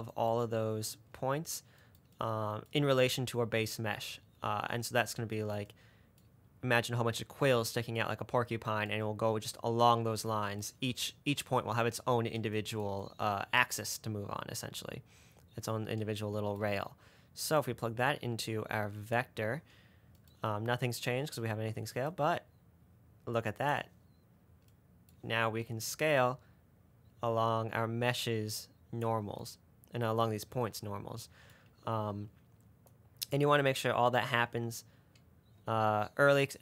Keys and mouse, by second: 5.8 middle click, 8.9-10.5 middle drag, 17.9-19.4 drag, 22.3-23.4 drag, 23.4 middle click, 23.9 click, 26.2-27.6 drag, 33.2 middle click.